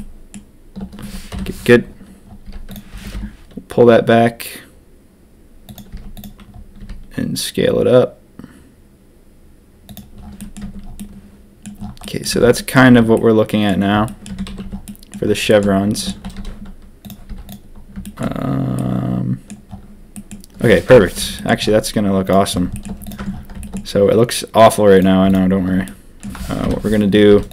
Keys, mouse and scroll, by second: 1.3 ctrl+KP_3, 2.4 z, 2.8 g, 5.6 click, 5.8 z, 6.7 s, 10.3 middle click, 10.6 Tab, 10.9 middle click, 12.0 middle drag, 12.3 Tab, 12.5 middle click, 12.7 a, 12.9 a, 13.1 middle click, 14.0 middle click, 14.2 Tab, 14.4 a, 14.6 a, 14.8 drag, 15.4 shift+drag, 15.9 shift+drag, 16.3 ctrl+s, 17.2 z, 18.0 shift+middle drag, 18.7-19.5 middle drag, 20.1 middle drag, 20.8 ctrl+KP_3, 21.3 shift+middle drag, 22.2 click, 22.7 shift+click, 23.0 click, 23.2 Tab, 23.7 shift+click, 25.0 click, 25.3 shift+click, 25.8 click, 26.6 ctrl+KP_3, 27.3-27.5 typing.